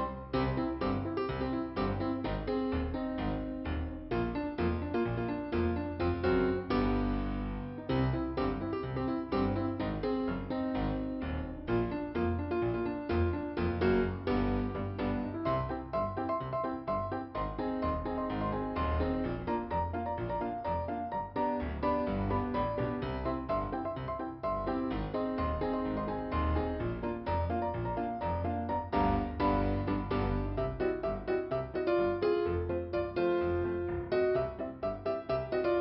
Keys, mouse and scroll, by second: 1.2 click, 4.4 click, 13.6 scroll down 2, 14.5 scroll up 1, 15.6 click, 19.2 p, 20.1 scroll down 1, 25.4 scroll up 1, 26.4 click, 27.2 click, 27.4 scroll down 2, 29.4 scroll up 2, 32.7 middle click.